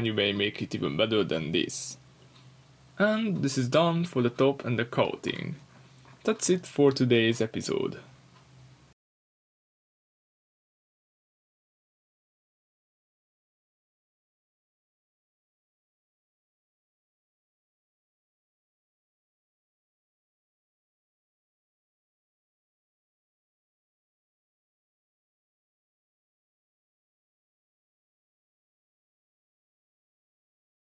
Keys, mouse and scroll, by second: 2.4-3.4 drag, 3.4-4.3 middle drag, 4.1 scroll down 2, 4.3 click, 4.5-5.0 middle drag, 5.0 drag, 5.2 middle click, 5.3-5.8 scroll up 2, 5.8 click, 5.9-6.7 scroll up 2, 6.7-7.7 drag, 7.3 Return, 7.7-10.8 middle drag, 9.3 Tab, 9.6 scroll down 2, 10.3-10.8 scroll up 2, 10.8 drag, 11.0 middle click, 11.2 Tab, 11.6 shift+middle click, 11.8 scroll up 2, 12.4 Tab, 13.1 drag, 13.2-13.7 middle drag, 13.7 click, 14.0 middle click, 14.2 r, 14.9 click, 15.0 g, 15.9 click, 16.0-17.0 middle drag, 16.5 r, 17.0 click, 17.3 g, 18.9 click, 19.0-20.7 middle drag, 20.3 r, 20.7 click, 20.8 g, 21.5 click, 21.6-21.9 middle drag, 24.0 ctrl+z, 25.7 middle click, 27.2 ctrl+z, 28.8 click, 29.1-30.8 middle drag, 30.8 click.